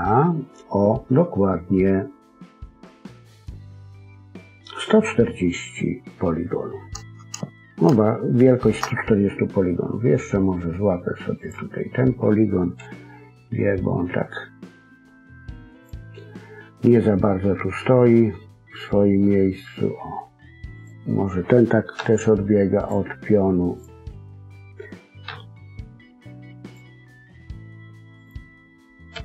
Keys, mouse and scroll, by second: 8.0 shift+middle click, 8.7-11.0 scroll up 2, 11.3 click, 12.7 g, 16.7-17.1 scroll down 1, 17.1 middle click, 20.7 click, 21.9 g, 23.7 click, 25.2 g, 28.1 click, 29.1 g.